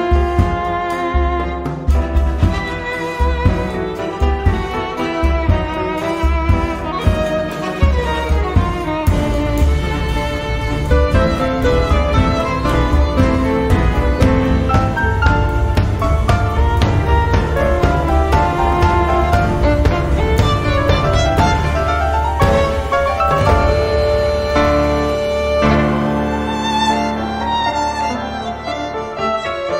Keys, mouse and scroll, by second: 0.7-1.8 drag, 2.6 click, 3.6-4.4 scroll down 2, 4.7 click, 7.6-9.0 drag, 9.3 click, 9.8 click, 10.5 click, 11.8-12.7 scroll down 1, 12.7 scroll down 1, 13.7-14.2 scroll down 2, 14.2 scroll down 1, 14.9 click, 15.8 click, 20.4 click, 23.0 click, 25.2 click, 26.5 0, 27.8 click, 29.5 -.